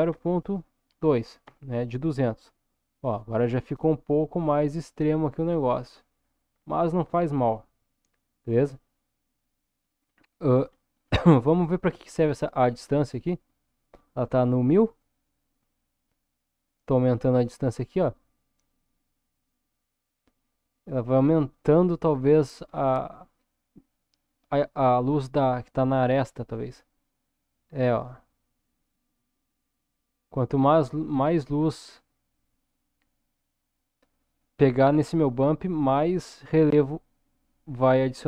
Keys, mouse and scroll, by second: 3.6-6.7 middle drag, 10.1-10.6 scroll up 1, 10.6-12.6 scroll up 3, 15.1-38.2 drag.